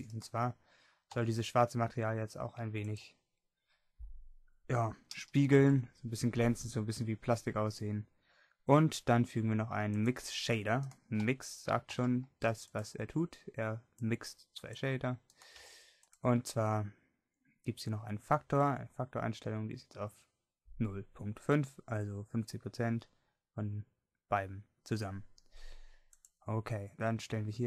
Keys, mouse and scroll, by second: 12.8 g.